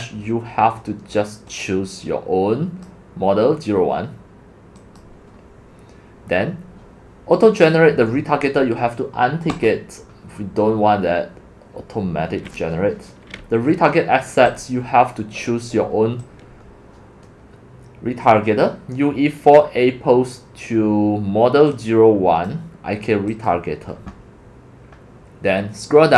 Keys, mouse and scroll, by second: 1.5-2.9 drag, 14.5 click, 16.2-18.7 scroll down 2, 18.7 click, 19.5 drag, 21.7-22.7 drag, 23.3 click.